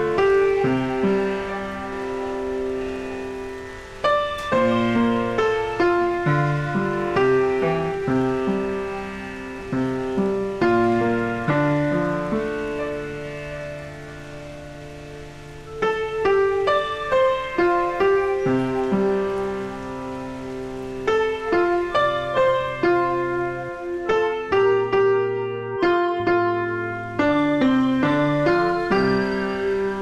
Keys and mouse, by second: 0.0-0.5 typing, 1.7 click, 2.4 s, 2.7 click, 4.8 click, 6.4 click, 14.2 click, 17.6 Escape, 17.8 click, 19.0 click, 20.4 click, 20.9 ctrl+x, 21.7 click, 23.5 KP_0, 23.9 Return, 28.1 click, 29.3 click.